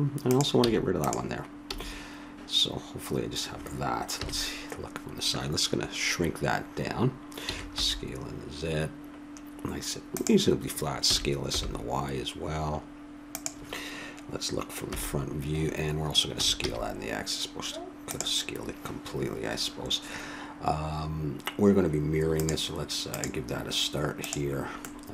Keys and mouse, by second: 0.2-2.1 drag, 0.6 x, 1.7 a, 4.1 KP_3, 7.4 s, 11.0 s, 14.9 KP_1, 16.3 s, 18.6-21.6 middle drag, 22.3-25.0 drag, 24.8-25.1 middle drag.